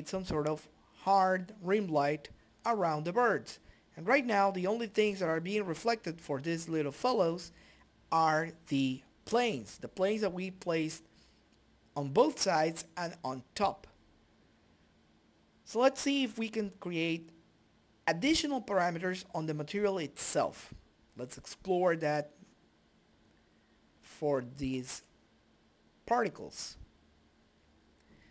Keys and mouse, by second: 5.6 click, 7.5 right click, 10.0 click, 11.9 click, 15.6 click, 22.9 click, 25.5 click, 27.1-28.3 drag.